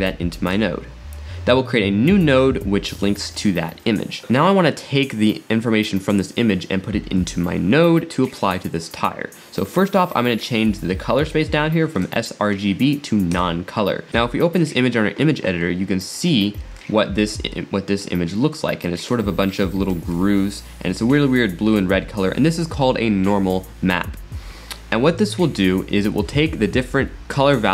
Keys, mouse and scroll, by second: 1.0 click, 2.4 scroll up 3, 3.2 middle click, 4.2-4.7 drag, 11.9-15.0 drag, 15.6 scroll down 5, 16.4-17.1 scroll up 9, 17.6-20.0 middle drag, 20.0-20.5 scroll up 4, 20.8-21.3 scroll down 8, 21.6 scroll up 5, 22.0-22.6 scroll down 8, 24.8-25.3 scroll down 9, 25.3 scroll up 5, 26.0-26.8 scroll up 5.